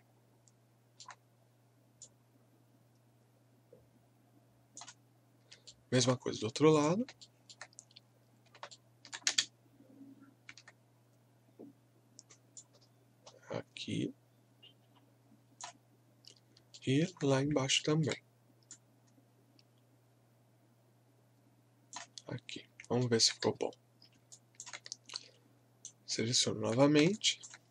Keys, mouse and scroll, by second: 2.0-5.2 drag, 2.3 typing, 5.2 scroll down 1, 5.6 alt+middle click, 6.2 scroll up 1, 6.7 click, 7.2 alt+middle click, 7.8-8.1 scroll up 1, 8.3 scroll, 8.7 alt+middle click, 9.3 space, 10.0 scroll down 1, 11.6 scroll down 1, 12.6-16.3 drag, 16.3 scroll down 1, 16.7 alt+middle click, 17.4 scroll up 1, 17.8 alt+middle click, 18.7-22.4 drag, 22.4 scroll down 1, 23.0 alt+middle click, 23.4 w, 24.3 alt+click, 25.1 right click, 26.1 scroll down 1, 27.1 alt+click.